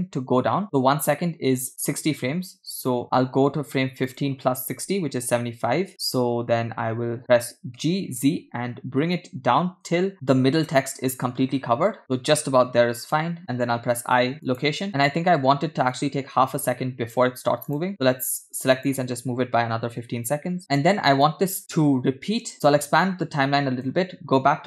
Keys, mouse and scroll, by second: 3.0-6.0 drag, 8.2 g, 13.8 i, 16.1-17.2 drag, 17.7 drag, 18.0-18.9 drag, 19.9 g, 20.7 scroll down 4, 21.4 click, 22.8 a, 22.8 x, 22.8-23.9 drag.